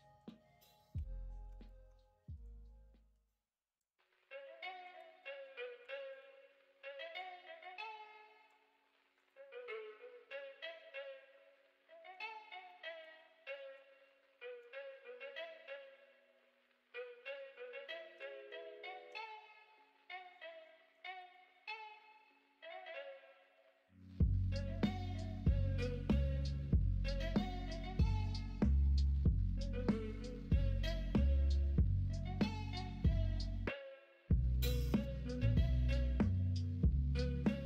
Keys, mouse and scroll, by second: 0.9 2, 1.5 click, 5.8 1, 20.9 ctrl+b.